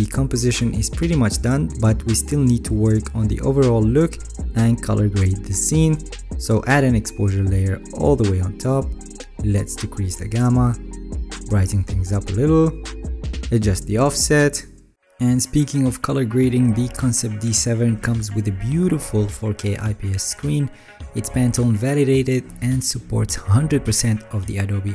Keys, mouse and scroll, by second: 3.7 ctrl+s.